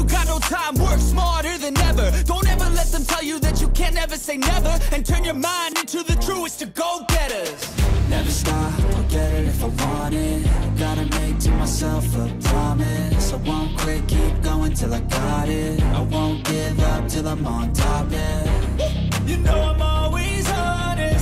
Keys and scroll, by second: 0.0 ctrl+z, 2.3 ctrl+z, 3.1 e, 4.8 ctrl+z, 5.4 ctrl+z, 6.0 ctrl+z, 7.3 ctrl+z, 8.4 ctrl+z, 11.9 ctrl+z, 19.9 e.